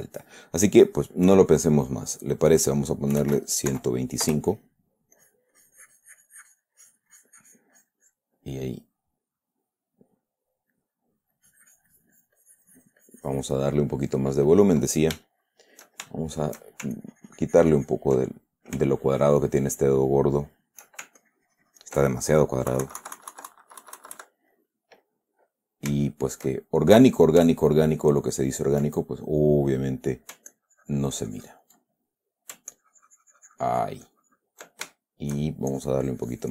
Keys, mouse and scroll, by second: 2.6 click, 3.3-4.6 typing, 5.5-8.7 drag, 11.1 middle click, 13.9 click, 15.6 shift+middle click, 16.5 shift+middle click, 17.3-18.5 ctrl+shift+drag, 18.7 ctrl+middle click, 19.3 ctrl+shift+middle click, 19.9 shift+middle click, 20.7 shift+middle click, 21.6 ctrl+shift+click, 23.1 KP_Subtract, 24.9 click, 25.5 middle click, 26.4-27.4 shift+middle drag, 27.9-28.9 ctrl+drag, 29.3 ctrl+middle click, 30.1 middle click, 30.9-32.9 ctrl+drag, 33.1-35.0 ctrl+drag, 35.3 ctrl+shift+click, 36.1-36.5 shift+drag.